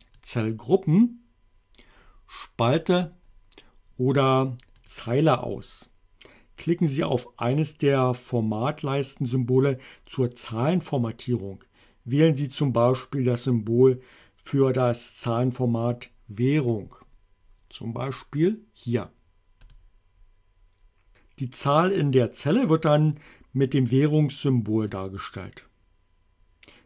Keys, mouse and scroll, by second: 2.7 click, 4.9 click, 19.8 click.